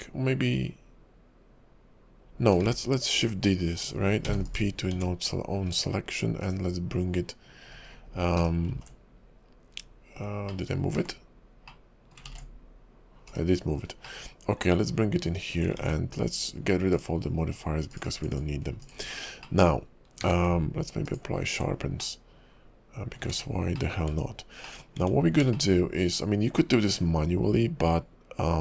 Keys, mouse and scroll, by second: 2.8 shift+d, 4.2 p, 4.9 Tab, 5.7 click, 6.4 /, 8.4 /, 8.9 ctrl+z, 10.5 middle click, 11.0 ctrl+z, 11.7 middle click, 12.4 ctrl+z, 13.3 /, 13.8 scroll up 2, 14.0 middle click, 15.5 scroll down 2, 15.8 ctrl+`, 18.0 click, 19.2 scroll up 3, 19.4 middle click, 19.8-20.7 scroll down 2, 20.2 q, 22.0 middle click, 23.2 Tab, 23.7 middle click, 24.1 Tab, 24.6 middle click, 25.0 Tab, 25.5 shift+middle click.